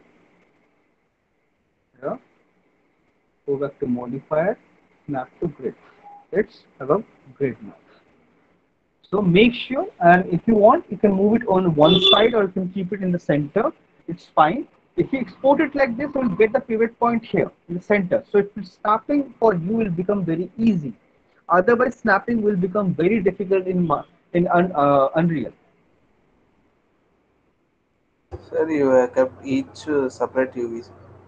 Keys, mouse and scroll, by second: 1.7 click, 3.4 click, 5.2 click, 7.1 alt+middle click, 7.3 middle click, 7.5 middle click, 8.1 alt+middle click, 8.4 scroll, 9.3 alt+middle click, 10.4 scroll, 14.7 alt+middle click, 15.3 alt+middle click, 16.3 alt+middle click, 27.0 click, 27.0 alt+middle click, 27.3 middle click, 28.2 click.